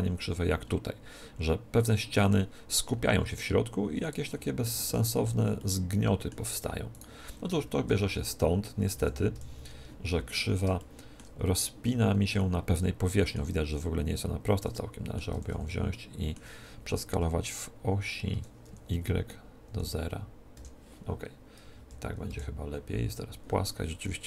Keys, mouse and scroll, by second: 2.9-7.2 middle drag, 6.8-8.5 right drag, 7.6 KP_1, 8.8 KP_7, 10.3-14.2 middle drag, 14.6-17.6 middle drag, 15.2 a, 15.4 a, 18.2 s, 21.6 KP_1, 22.2 KP_7, 23.9-24.2 middle drag.